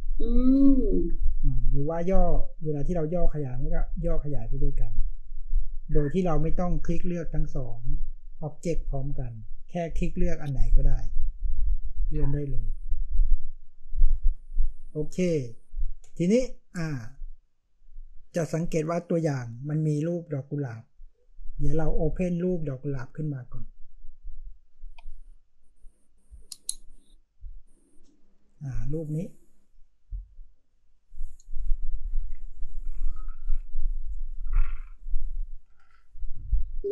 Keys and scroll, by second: 15.2 space.